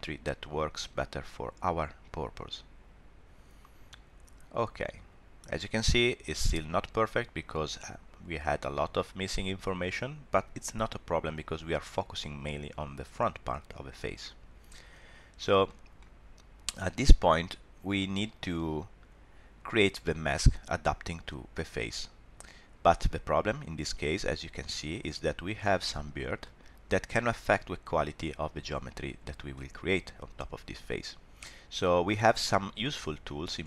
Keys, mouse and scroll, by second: 7.5 middle click, 14.7 scroll up 1, 15.6 shift+middle click, 15.9 middle click, 18.0 middle click, 22.9 middle click, 26.4 middle click, 29.5 middle click, 31.9 scroll up 1, 32.3 shift+middle click, 32.8 middle click.